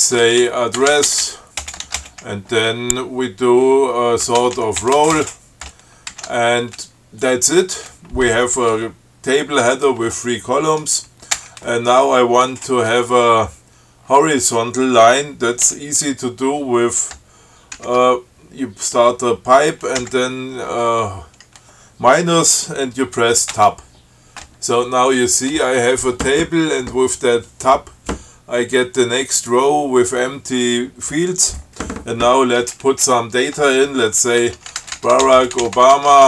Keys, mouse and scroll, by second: 0.4-1.8 typing, 2.0 alt+shift+<, 4.4-5.7 typing, 6.3 alt+<, 11.6 Return, 18.0 alt+<, 20.2 -, 23.8 Tab, 34.4-36.2 typing.